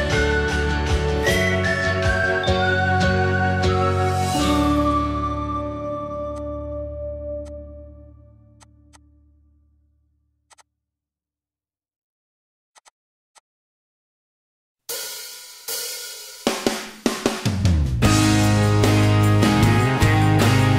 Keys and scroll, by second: 4.2 i, 11.8 ctrl+g, 13.1 f, 15.3-16.5 typing, 17.1 Delete, 19.6-20.7 typing.